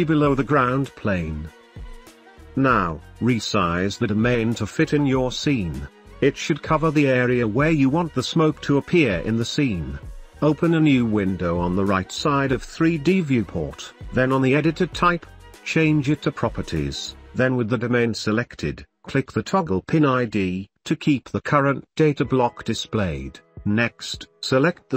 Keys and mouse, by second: 0.2 Tab, 0.3 middle click, 0.9 shift+middle click, 1.2 middle click, 2.6 Tab, 3.0 click, 3.3 click, 3.6 KP_7, 3.7 shift+middle click, 3.9 middle drag, 4.0 drag, 4.2 s, 4.5 x, 4.7 click, 4.8 Tab, 5.1 shift+click, 5.3 g, 5.5 click, 5.7 click, 6.0 shift+click, 6.4 g, 6.8 click, 7.0 shift+click, 7.4 shift+click, 7.5 ctrl+s, 7.6 Tab, 8.0 middle click, 8.4 middle click, 10.8-11.8 drag, 12.4 n, 13.4-16.2 drag, 17.8 n, 23.2 drag.